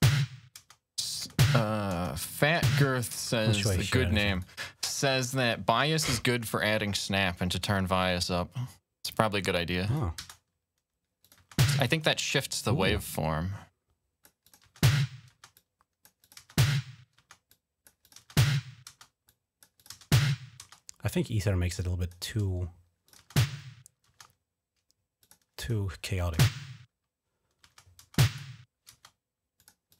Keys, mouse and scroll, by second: 0.7 scroll up 1, 1.9 scroll up 1, 4.1 click, 7.8-9.7 drag, 10.0 space, 11.0 click, 11.2-11.9 typing, 12.3-14.0 drag, 14.2 click, 14.4-15.1 typing, 14.5 click, 15.3 click, 16.0 click, 17.3 click, 17.8 click, 19.0 click, 19.6 click, 21.0 click, 22.8 click, 25.0 click, 28.0 click, 29.3 click.